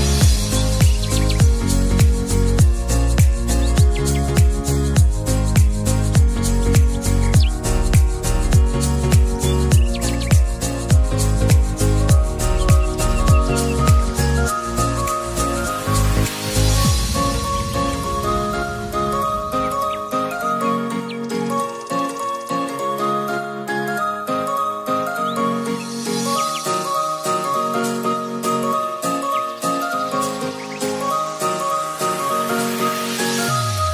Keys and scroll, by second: 28.3 ctrl+z.